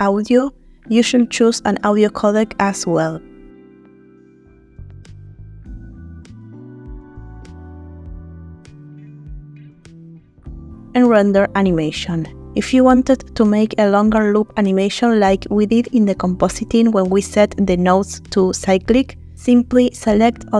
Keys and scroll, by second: 16.0 space.